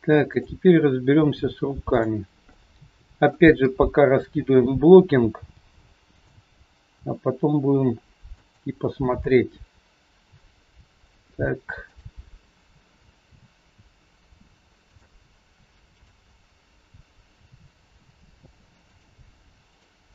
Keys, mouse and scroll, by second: 0.1 shift+click, 2.4 middle click, 3.5 KP_3, 4.0 scroll down 2, 4.9 scroll down 2, 5.4 g, 7.0 r, 11.8 shift+click, 13.2 r, 15.8 shift+click, 17.4 r, 19.6 click.